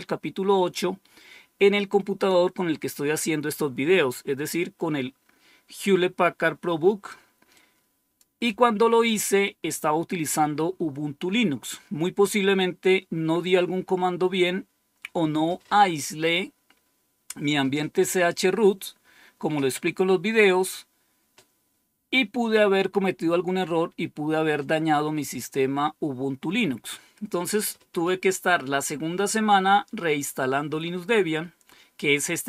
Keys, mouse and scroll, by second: 7.4 click, 21.2-21.9 scroll down 1.